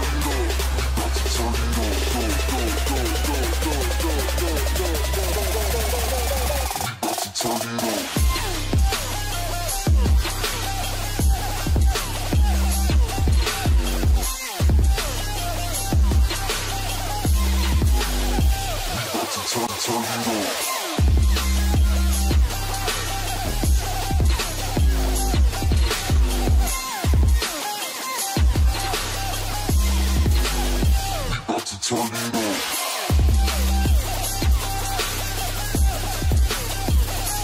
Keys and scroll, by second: 0.3 ctrl+shift+g.